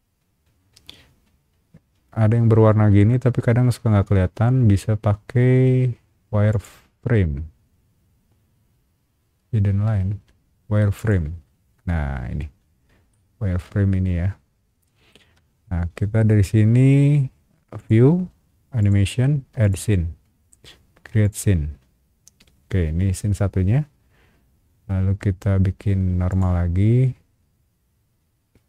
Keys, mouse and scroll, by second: 6.5 click, 10.9 click, 13.1-15.1 shift+middle drag, 17.8 click, 18.8 click, 19.6 click, 21.2 click, 26.3 click.